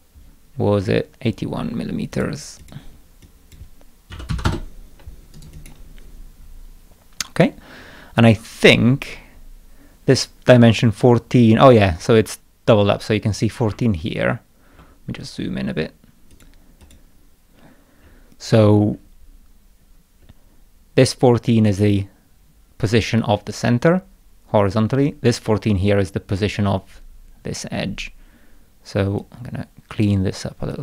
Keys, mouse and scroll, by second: 0.6 scroll down 2, 1.3 scroll up 2, 2.1 click, 2.6 click, 3.3 click, 5.4 right click, 5.6 click, 13.9 ctrl+scroll up 2, 14.6 ctrl+scroll down 2, 16.3 click, 16.8 click, 17.7 middle click, 18.5 middle click, 18.9 middle click, 19.8 middle click, 20.2 middle click, 29.2-30.1 drag, 30.7-30.8 drag.